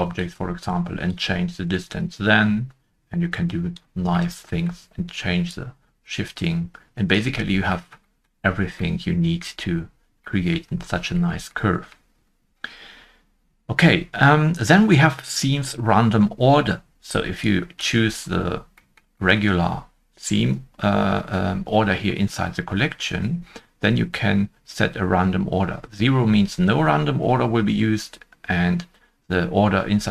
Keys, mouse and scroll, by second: 0.9 shift+click, 1.1 shift+click, 4.1 shift+middle click, 4.1 scroll up 1, 5.5 shift+click, 7.6-8.0 scroll down 1, 8.0 shift+middle click, 8.4-8.7 scroll down 1, 9.0 scroll down 1, 9.1 middle click, 9.5 middle click, 9.9 scroll down 1, 11.1-11.6 scroll down 1, 16.5 middle click, 16.5-17.4 scroll down 1, 19.3 middle click.